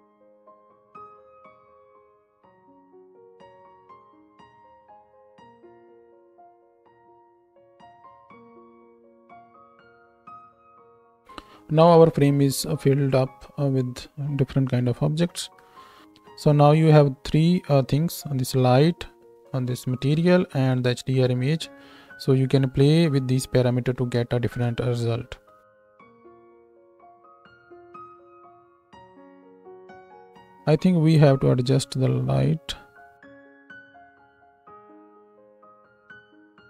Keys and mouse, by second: 0.6 r, 2.3 shift+d, 3.0-4.4 middle drag, 3.0 s, 3.7 r, 4.4-6.8 right drag, 5.3 shift+d, 6.0 s, 6.5 r, 6.8-9.1 drag, 7.0 z, 9.1-27.8 right drag, 11.2-27.8 drag, 27.8-36.6 middle drag, 33.3 z, 33.9 g, 35.6 s, 36.0 z, 36.3 z.